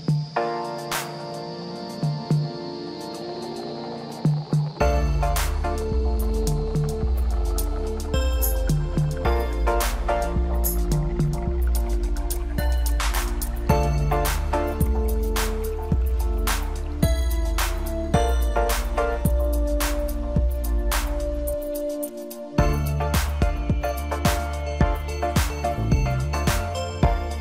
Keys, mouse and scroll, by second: 0.0-3.1 drag, 3.8-4.3 scroll down 3, 4.3 scroll up 2, 4.6-5.4 middle drag, 5.4-6.0 scroll up 3, 6.0 click, 7.8 click, 8.3-9.3 scroll down 1, 9.3-10.3 scroll up 7, 10.3 click, 11.9 click.